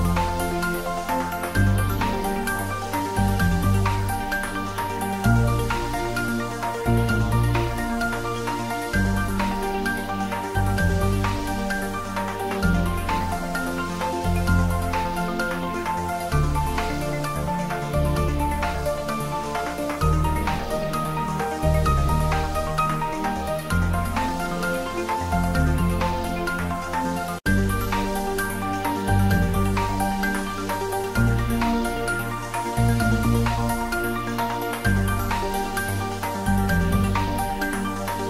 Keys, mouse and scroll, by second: 0.1 scroll up 1, 0.2 middle click, 0.3 Tab, 0.7 ctrl+r, 1.3 click, 2.6 scroll up 1, 2.9 middle click, 3.3-3.7 scroll down 1, 4.6 click, 5.9 ctrl+r, 6.5 click, 8.6 click, 8.8 scroll up 1, 9.0 middle click, 9.6 ctrl+r, 9.9 click, 11.6 click, 11.8 middle click, 12.2 Tab, 12.3 scroll up 1, 12.5 middle click, 12.8-13.2 scroll down 1, 13.2 Tab, 13.7 ctrl+r, 14.1 click, 14.8 Tab, 15.0-16.5 middle drag, 16.5 click, 16.9-17.3 scroll down 1, 17.4 s, 17.5 z, 18.5 click, 18.9 shift+d, 19.1 z, 19.7 click, 20.5 s, 21.9 click, 22.3 g, 22.7 Left, 23.4 click, 25.6 s, 26.1 y, 27.1 click, 27.3-30.1 middle drag, 30.1-30.4 scroll down 1, 30.4 middle click, 30.7 click, 32.0 shift+click, 32.5 g, 32.7 x, 33.1 Right, 33.7 click, 34.5 shift+d, 34.6 r, 35.2 click, 36.0 s, 36.5 click, 36.7 scroll up 1, 37.2 s, 38.0 click.